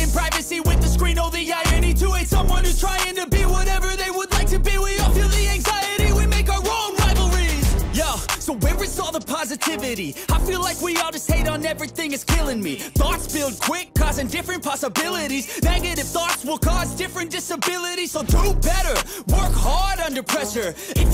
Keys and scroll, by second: 0.5 ctrl+z, 2.4 e, 12.2 b, 17.3 ctrl+z, 18.4 ctrl+z, 20.2 ctrl+z.